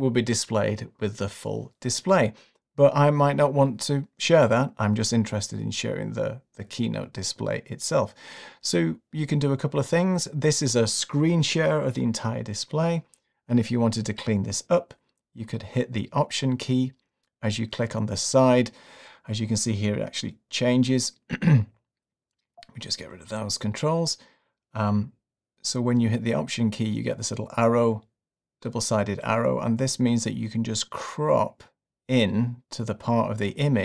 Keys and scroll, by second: 22.4 alt+`, 23.2 super+`.